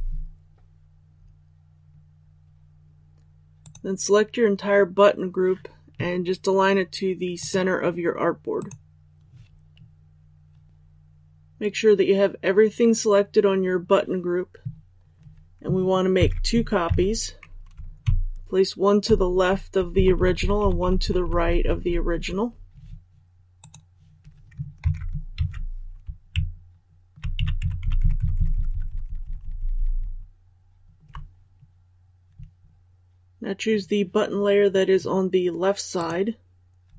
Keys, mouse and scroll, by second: 3.5 click, 16.1 ctrl+c, 18.0-18.6 shift+Left, 18.6 shift+Left, 19.8 shift+Left, 20.1 shift+Left, 20.3 shift+Left, 20.5 shift+Left, 20.7 shift+Left, 20.9 shift+Left, 21.1 shift+Left, 21.3 shift+Left, 23.5 click, 24.7 ctrl+c, 25.3 ctrl+v, 26.2-26.9 shift+Right, 32.7 click.